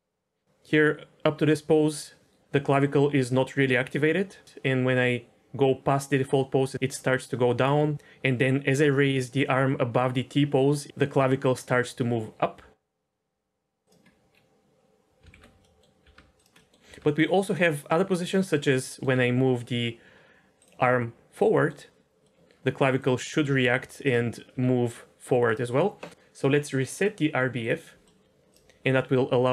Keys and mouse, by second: 15.3 alt+r, 15.6 middle drag, 16.0 r, 16.5 middle drag, 16.9 r, 18.8 middle click, 20.3 r, 20.9-21.7 middle drag, 22.3 middle click, 22.9 click, 23.5 r, 24.1 right drag, 24.5 r, 27.6 click, 28.0-28.5 middle drag, 29.4 r.